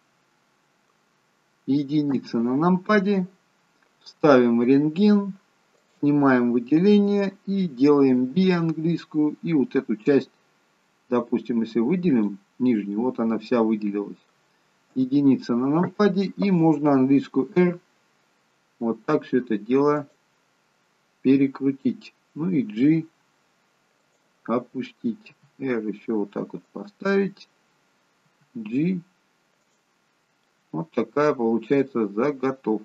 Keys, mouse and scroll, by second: 2.2 KP_1, 5.3 click, 6.0 click, 8.4 b, 13.1 middle click, 15.1 KP_1, 17.6 r, 25.5 r, 30.6 middle click.